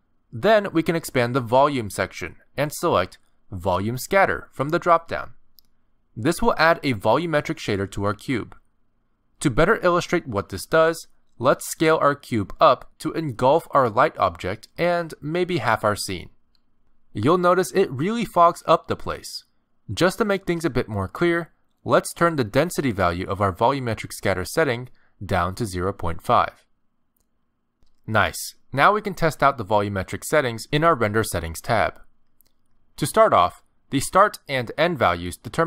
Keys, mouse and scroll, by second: 1.8 click, 2.7 click, 3.5 click, 11.3 s, 13.5 middle click, 13.9 scroll down 3, 14.2 g, 15.7 middle click, 22.6 click, 27.4 middle click, 29.1 scroll down 1, 29.3 middle click, 31.0 click, 32.6 click, 33.5 middle click.